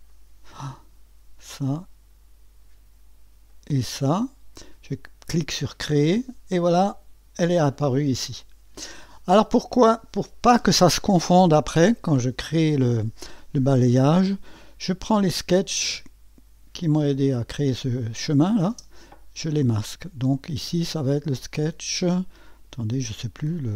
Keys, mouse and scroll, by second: 0.1 click, 1.5 click, 3.5 click, 5.7 click, 9.1 click, 9.4 click, 15.2 click, 18.7 space, 21.6 click, 22.5 click, 23.5 click.